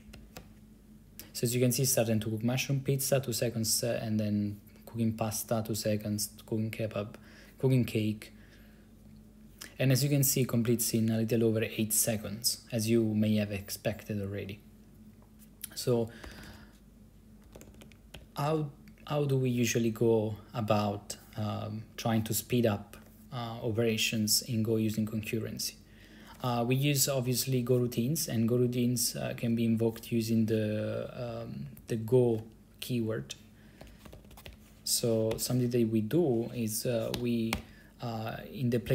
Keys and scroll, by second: 0.0-0.4 typing, 16.2-18.0 typing, 18.3 Return, 31.4 Down, 31.6 Down, 31.7 Down, 31.8 Down, 31.9 Down, 32.0 Down, 33.7-35.5 typing, 37.2 g, 37.7 o.